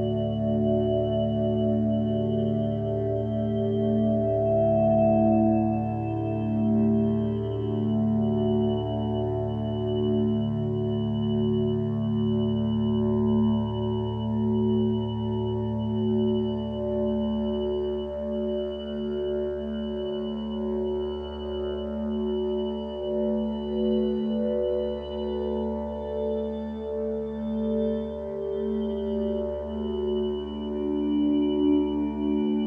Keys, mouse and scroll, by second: 1.7 ctrl+z, 3.7 ctrl+z, 21.0 ctrl+space, 27.5 ctrl+d, 27.9 m.